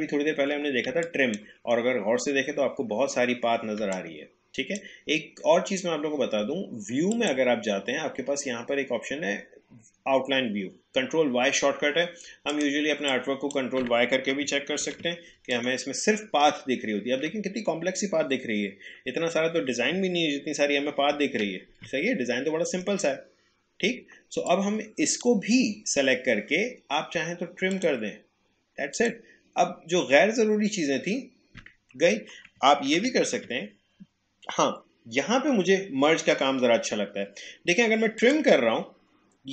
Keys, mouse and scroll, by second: 0.9 space, 1.0 click, 1.4 space, 3.8 space, 3.9 click, 4.3 space, 7.1 click, 12.6-14.8 drag, 14.8 ctrl+y, 15.5 click, 16.2-16.9 alt+scroll down 1, 16.9 alt+scroll up 1, 19.9-20.4 alt+scroll up 1, 21.1 ctrl+y, 24.5-27.7 drag, 32.5 click, 32.9 ctrl+z, 38.1 click.